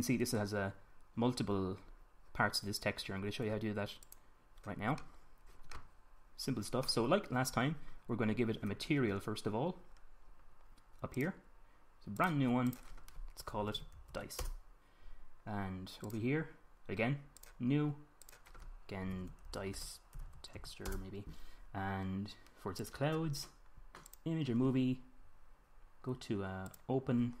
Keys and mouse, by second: 11.7-15.2 drag, 15.2-16.7 middle drag, 16.7-20.7 drag, 20.7-23.5 middle drag, 23.5-25.3 drag, 25.3-27.3 middle drag, 27.3 click.